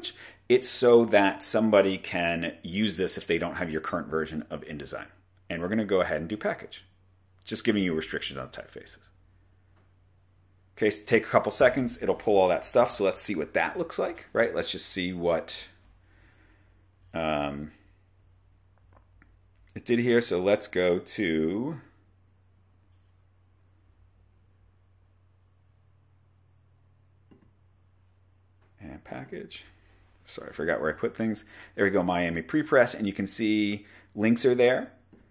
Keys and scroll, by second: 12.9 super+Tab.